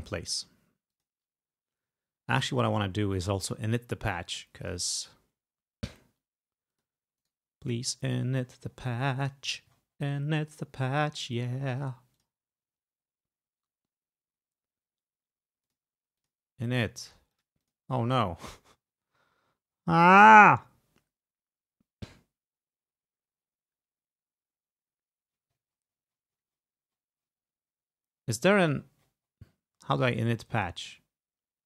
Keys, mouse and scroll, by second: 1.0 click, 4.7 click, 6.8 click, 7.3 right click, 8.3-10.4 scroll down 1, 12.2 click, 15.7 click, 16.3 click, 17.1 click, 19.5-20.7 scroll down 2, 23.5 scroll down 2, 25.4-26.8 scroll up 2, 27.0 scroll up 2, 27.5-28.9 scroll, 28.9-30.3 scroll down 2, 30.4 scroll down 2.